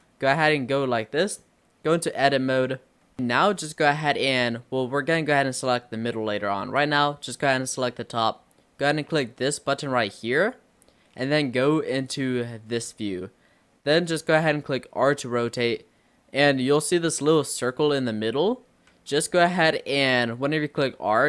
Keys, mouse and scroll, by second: 1.4-2.0 middle drag, 2.0 scroll up 1, 2.1 Tab, 3.2 shift+middle click, 3.9-4.7 scroll up 2, 4.9-9.2 shift+middle drag, 10.4 click, 12.1 click, 12.7-13.3 scroll down 6, 14.8 r, 18.4-18.7 scroll up 2, 19.0 ctrl+z, 20.9 r.